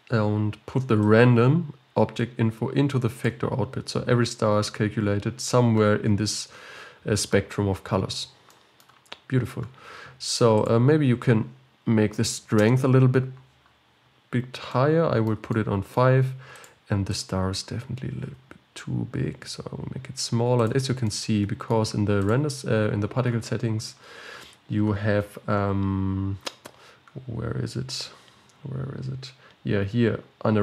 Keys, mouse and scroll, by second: 12.9-14.0 drag, 14.0-14.7 scroll up 1, 14.7 scroll up 2, 14.8-16.8 middle drag, 16.8 click, 17.3 click, 18.4 s, 21.2-22.4 middle drag, 22.4 click.